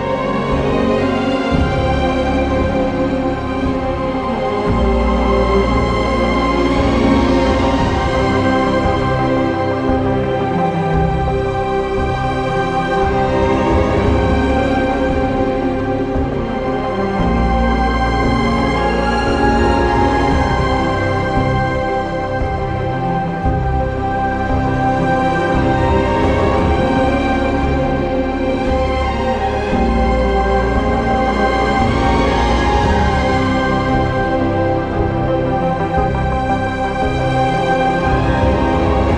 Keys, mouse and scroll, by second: 5.7 click, 7.3-8.7 typing, 17.6 ctrl+s, 20.0 ctrl+s, 20.1 ctrl+z, 21.6 ctrl+z, 23.1 e, 27.4 b, 28.3 ctrl+z, 32.2 ctrl+z, 35.1 ctrl+z, 35.2 ctrl+s, 36.0 typing, 37.2 b, 38.8-39.1 typing.